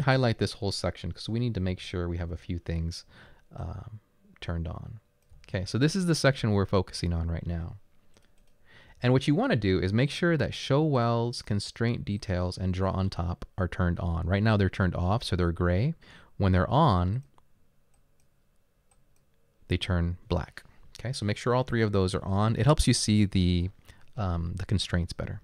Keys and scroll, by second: 2.2 F7, 9.2 F8.